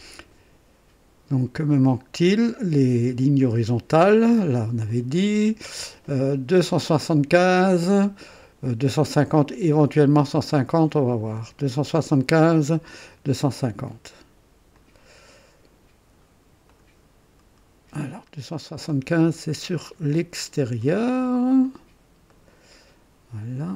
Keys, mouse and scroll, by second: 2.3-3.2 drag, 4.9 click, 14.7 click, 16.6 click, 19.5 click, 21.6 click, 22.3 right click.